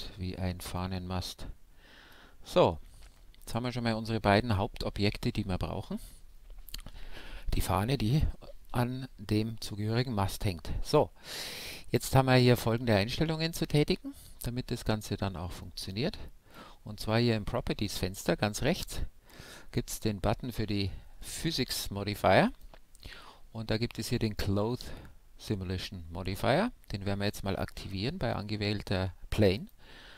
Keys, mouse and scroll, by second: 1.5-5.7 middle drag, 2.5 Tab, 9.3-13.3 middle drag, 10.9-13.3 right drag, 15.6-18.8 drag, 18.8-20.8 middle drag, 22.5-24.2 drag, 29.6-30.1 drag.